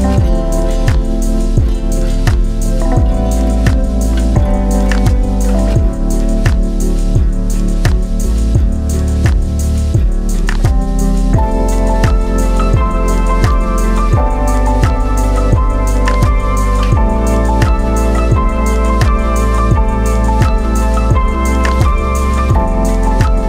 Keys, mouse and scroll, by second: 3.7 scroll down 1, 5.0 click, 5.9 middle click, 7.1 click, 15.3 click, 17.3 scroll down 1, 18.2 click.